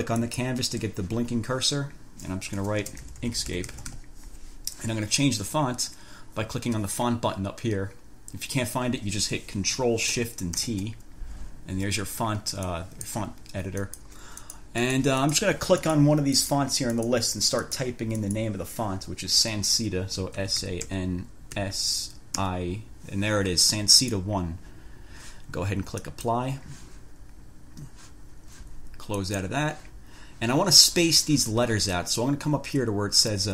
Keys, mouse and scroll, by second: 0.5 click, 2.8-4.6 typing, 10.7 ctrl+shift+t, 12.8 click, 14.1 click, 14.6 click, 16.1 click, 16.6 click, 17.2 click, 17.9 click, 18.3 click, 20.3-22.5 typing, 24.3 click, 26.2 click, 29.3 click.